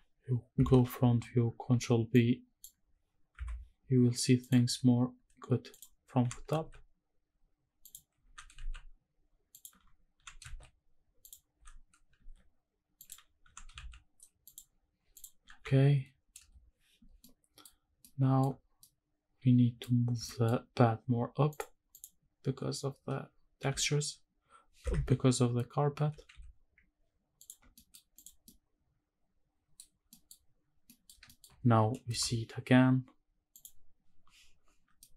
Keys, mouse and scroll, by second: 0.6 KP_1, 1.7 alt+b, 3.3 KP_7, 4.4 click, 4.7-5.7 scroll up 2, 5.7 click, 6.2 g, 6.7 shift+z, 7.8 click, 8.2 s, 8.7 shift+z, 9.5 shift+click, 10.2 g, 10.5 shift+z, 11.2 click, 11.5 s, 12.2 shift+z, 13.0 click, 13.5 g, 13.9 shift+z, 14.5 shift+click, 15.1 click, 15.6 ctrl+s, 16.4 KP_0, 17.2-17.7 middle drag, 18.0 shift+middle click, 18.8-19.8 middle drag, 20.2 shift+middle click, 21.5 click, 21.9 click, 23.6 g, 24.8 Escape, 26.0 g, 26.3 z, 27.4 ctrl+click, 27.7 scroll down 1, 27.7 middle click, 28.0 scroll up 1, 28.1 click, 28.5-29.7 middle drag, 29.9 scroll up 1, 30.1 middle drag, 30.5-30.9 scroll down 3, 30.9 middle click, 31.2 shift+middle drag, 32.1 KP_0, 33.9 click, 35.0 middle click.